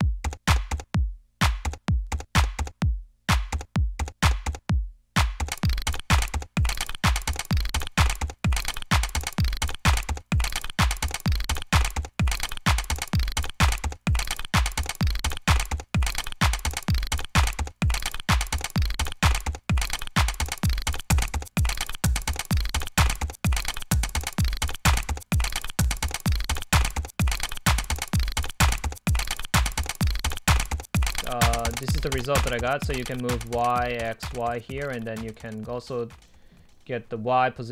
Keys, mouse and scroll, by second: 0.1 click, 0.3 click, 0.5 right click, 0.6 click, 0.9 Delete, 1.5 ctrl+c, 1.7 ctrl+v, 1.8 Delete, 2.0 right click, 2.1 middle click, 2.1 scroll up 2, 2.1 right click, 2.4 click, 2.5 Delete, 2.7 right click, 2.8 click, 3.0 double click, 3.3 double click, 3.3 Delete, 3.4 Return, 3.5 double click, 3.6 right click, 3.7 click, 3.8 Delete, 3.9 right click, 4.3-5.4 middle drag, 4.9 Right, 5.5 Delete, 5.6 click, 5.9 double click, 6.5 Return, 6.5 ctrl+z, 7.2 Return, 8.5 click, 10.3 ctrl+z, 10.8 click, 11.0 ctrl+v, 11.3 middle click, 11.4 right click, 11.5 click, 11.6 Delete, 11.7 Return, 11.7 ctrl+z, 11.8 double click, 11.8 Return, 11.9-12.5 drag, 12.3 right click, 12.5 ctrl+c, 12.5 ctrl+v, 12.6 click, 14.2 ctrl+-, 15.1 Delete, 15.4 Delete, 16.1 click, 16.1 Delete, 16.3 scroll up 2, 17.2 click, 17.4 Return, 18.5 Return, 18.6 double click, 18.7 Return, 19.9 ctrl+v, 21.1 click, 21.1 Delete, 21.3 click, 21.6 click, 21.8 Delete, 22.2 click, 23.1 Delete, 23.9 ctrl+l, 24.4 Delete, 24.6 click, 25.0 Return, 25.1 middle click, 25.1 double click, 25.2 Return, 25.3 double click, 25.6 Return, 25.7 double click, 25.8 Return, 25.9-26.3 drag, 26.3 Return, 26.3 double click, 26.4 Return, 26.5-26.9 drag, 26.9 right click, 27.1 drag, 27.4 click, 27.6 Return, 27.6 click, 28.0 right click, 29.4 Delete.